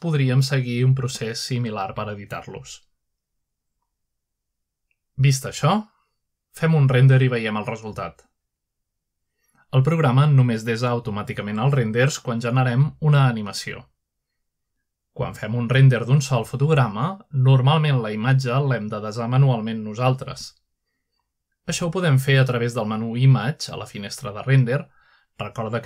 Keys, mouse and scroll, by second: 2.7 click, 3.3-3.8 drag, 4.0-4.9 scroll down 1, 8.8-9.4 scroll down 2, 9.4-10.6 middle drag, 11.5-12.2 drag, 14.5 click, 15.2 click, 15.5 click, 16.4-17.0 typing, 17.0 Return, 17.7 F12, 19.4 click, 20.8-21.4 scroll up 1, 21.4-22.0 scroll down 1, 21.6 typing, 22.0-22.7 scroll up 1, 23.1-23.9 typing, 24.0 Escape, 24.8 click.